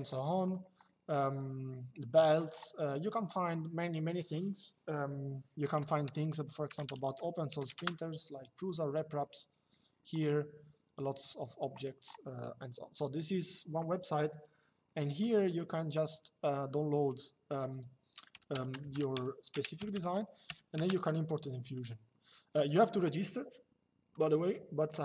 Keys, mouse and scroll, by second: 6.4 BackSpace, 7.5 KP_Enter, 14.9 click, 18.9 y, 19.2 space, 19.5 g, 20.5 Return, 23.8 click.